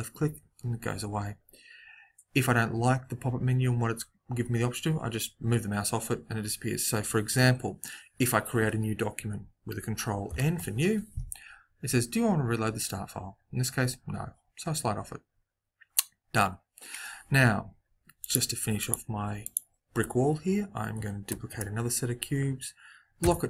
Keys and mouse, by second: 10.2 ctrl+n, 18.1-21.3 right drag, 21.3 shift+d.